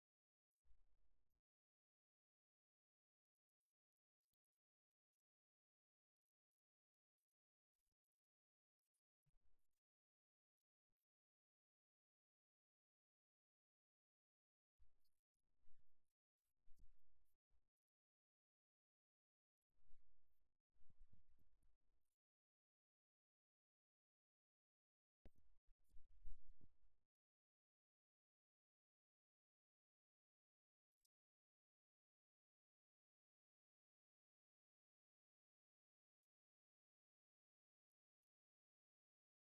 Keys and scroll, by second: 3.2-9.4 typing.